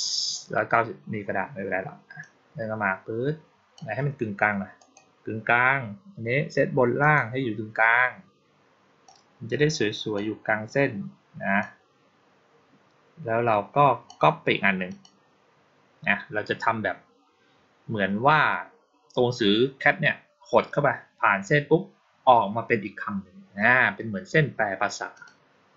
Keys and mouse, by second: 2.1-3.6 drag, 4.6 click, 6.9 click, 8.9-10.0 drag, 11.5-13.9 drag, 14.7 click, 25.0 click.